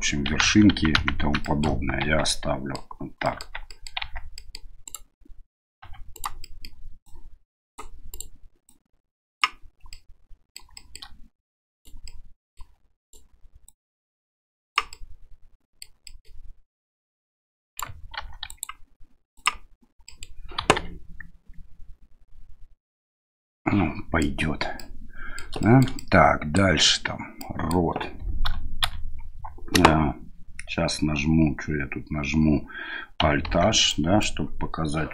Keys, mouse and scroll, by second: 0.4 ctrl+z, 0.7 ctrl+z, 1.0 ctrl+z, 1.4 middle click, 2.0 Tab, 2.3 middle click, 3.2 middle click, 3.7 middle click, 4.0 Tab, 4.3 middle click, 4.8 right click, 5.8 2, 6.1 right click, 6.4 middle click, 7.0 click, 8.1 right click, 8.7 click, 10.0 middle click, 10.8 shift+middle click, 11.7 right click, 12.0 middle click, 13.0 right click, 13.7-14.8 drag, 14.9 middle click, 16.1 middle click, 16.6-17.8 right drag, 18.2 ctrl+r, 20.1 middle click, 20.6 KP_1, 23.6 middle click, 24.8-25.4 middle drag, 25.6 shift+middle click, 26.0 middle click, 27.4 middle click, 28.4 a, 28.8 a, 33.5 alt+h, 33.9 middle click.